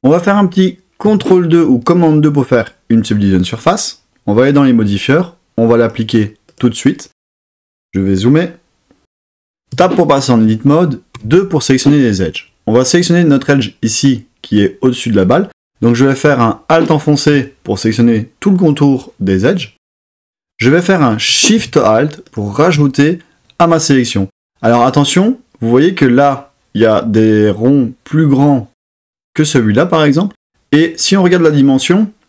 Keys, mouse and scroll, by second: 1.0 super+2, 5.8-6.6 drag, 9.7 Tab, 11.1 2, 16.7 alt+click.